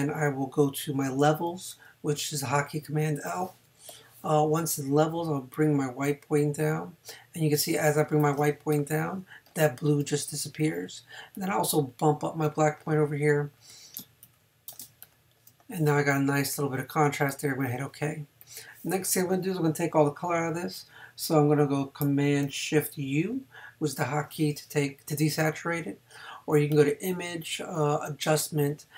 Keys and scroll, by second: 2.9 super+l.